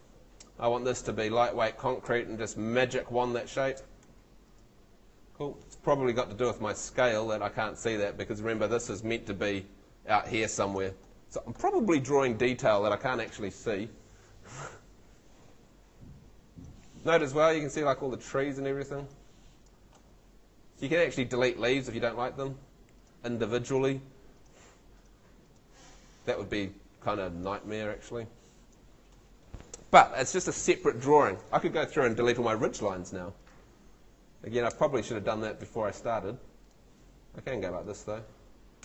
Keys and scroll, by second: 2.1 space, 4.0 Escape, 34.7 BackSpace.